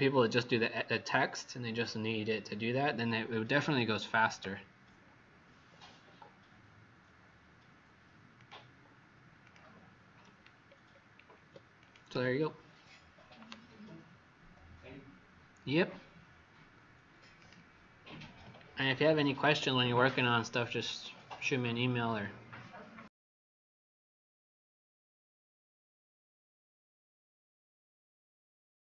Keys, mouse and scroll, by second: 10.6-11.4 alt+scroll down 2, 11.7 click.